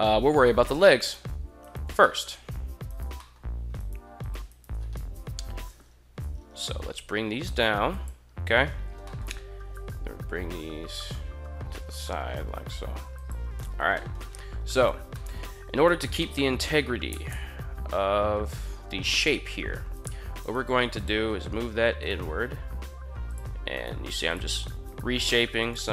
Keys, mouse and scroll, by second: 0.6 right click, 1.8 middle click, 2.6 shift+right click, 3.0 middle click, 3.5 shift+right click, 3.9 shift+right click, 4.8 KP_1, 5.8 g, 6.4 z, 7.6 click, 8.8 shift+middle drag, 9.5 g, 12.8 click, 13.8 shift+middle drag, 14.6 1, 14.9 middle drag, 15.6 right click, 16.0 middle click, 16.9 g, 17.1 g, 18.8 click, 19.8 right click, 20.2 right click, 20.8 click, 20.8 g, 21.7 right click, 22.4 g, 23.0 click, 23.5 right click, 23.7 g, 24.1 click, 24.5 right click, 25.1 g, 25.3 click.